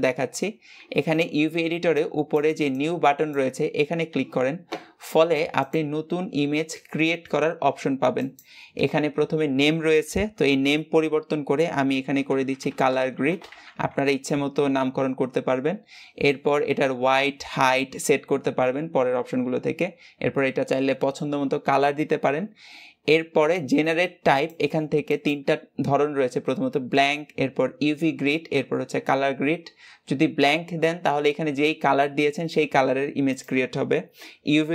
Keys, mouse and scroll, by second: 18.5 click.